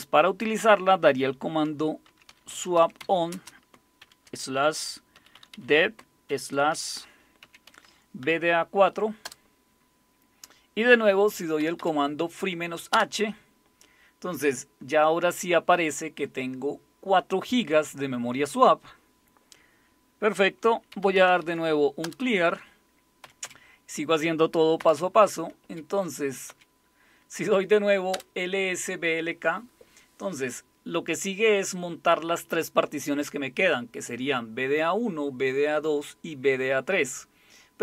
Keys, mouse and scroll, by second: 1.7-4.0 typing, 5.2-6.3 typing, 7.4-8.2 typing, 9.2 Return, 11.6 Up, 11.8 Up, 12.9 Return, 20.7-21.9 typing, 22.0 Return, 23.2 Up, 23.5 Up, 24.8 Up, 25.6 Up, 28.1 Return.